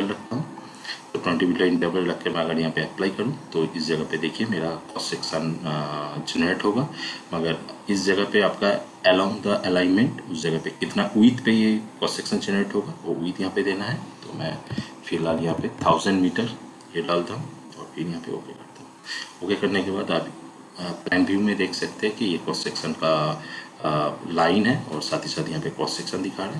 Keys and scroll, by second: 14.6 1, 15.1 0.